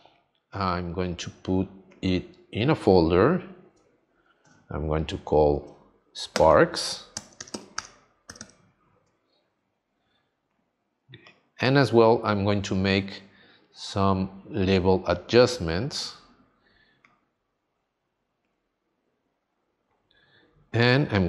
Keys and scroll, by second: 7.1 shift+s.